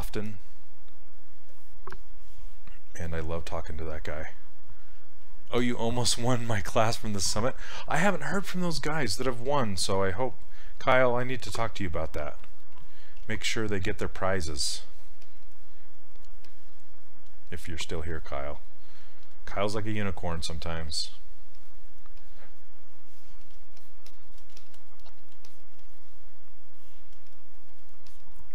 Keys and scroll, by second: 11.5 s, 13.2 s.